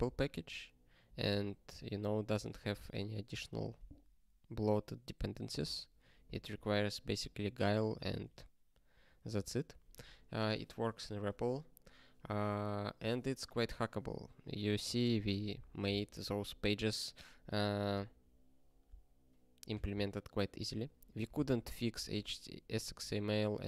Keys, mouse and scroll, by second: 8.0 ctrl+g, 9.0 ctrl+a.